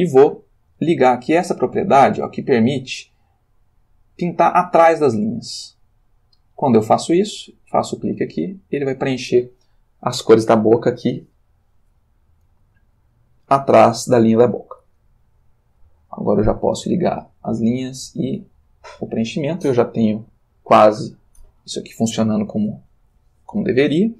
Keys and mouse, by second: 4.9 click, 7.9 click, 17.2 click, 18.6 click.